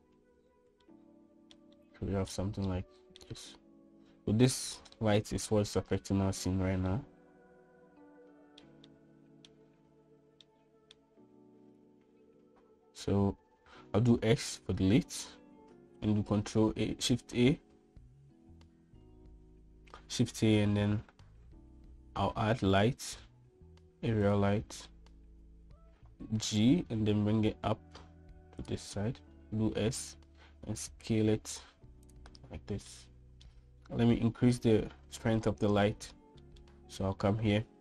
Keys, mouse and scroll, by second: 0.3 shift+middle click, 1.6-2.4 shift+middle drag, 2.7 middle click, 3.4 shift+middle click, 5.9-6.4 middle drag, 7.7-9.3 middle drag, 9.6 shift+middle click, 11.2 shift+middle click, 14.6 x, 17.0 shift+a, 26.9 g, 29.9 s, 33.6-34.2 middle drag, 36.3-36.7 shift+middle drag, 37.1 shift+middle click.